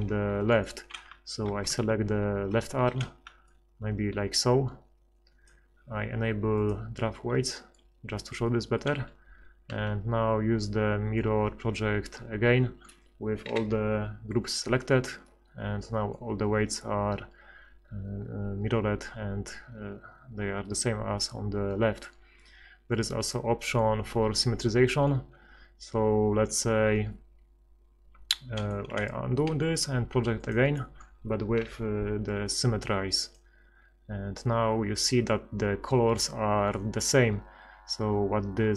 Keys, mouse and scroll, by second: 1.5 ctrl+KP_Add, 1.7-2.7 ctrl+KP_Add, 5.4 click, 7.5 click, 8.7-9.7 drag, 9.7 ctrl+x, 10.8-11.9 drag, 13.5 F6, 23.6-24.9 middle drag, 24.9-26.5 middle drag, 26.5 ctrl+x, 28.9 ctrl+z, 29.5 ctrl+x, 31.6 F6.